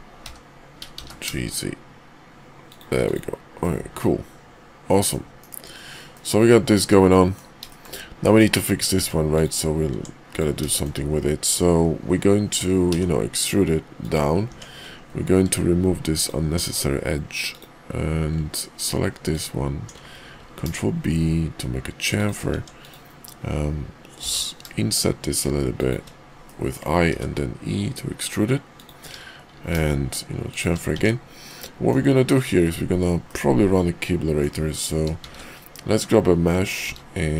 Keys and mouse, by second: 0.2 g, 3.0 click, 3.6-5.1 middle drag, 5.4 KP_5, 6.1-7.3 middle drag, 7.6 shift+middle click, 8.2 middle click, 8.8 Tab, 9.3 click, 9.9 Tab, 10.7 shift+middle click, 12.9 e, 14.4 Tab, 16.6 x, 18.6 alt+click, 20.3 ctrl+b, 22.5 Tab, 22.8 click, 24.1 i, 26.4 middle click, 27.0 e, 29.4 ctrl+b, 30.8 Tab, 31.5-31.9 middle drag, 33.3-34.4 middle drag, 35.1 shift+a, 36.8 shift+a.